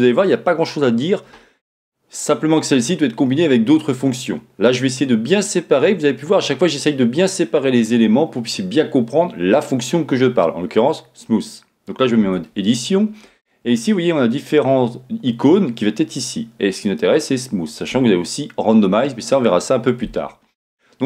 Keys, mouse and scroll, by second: 12.2 Tab, 17.1-21.0 drag.